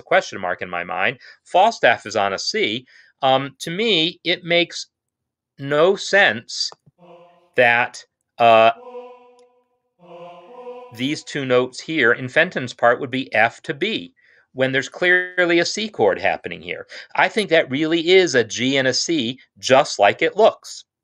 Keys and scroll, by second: 8.6 Right, 9.8 Left, 10.4 Right, 12.5 typing.